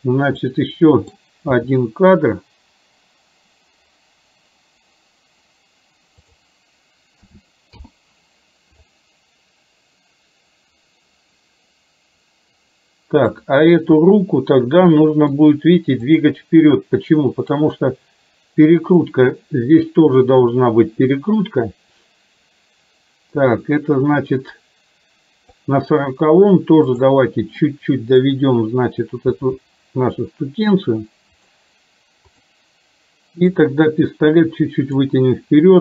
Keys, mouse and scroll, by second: 0.5-1.3 middle drag, 1.6 g, 7.3 a, 7.9 i, 9.0-13.5 drag, 15.0 middle click, 16.1 click, 17.8-19.3 drag, 20.4-25.8 drag, 27.0 click, 27.8 middle click, 29.4 r, 33.8-35.1 drag.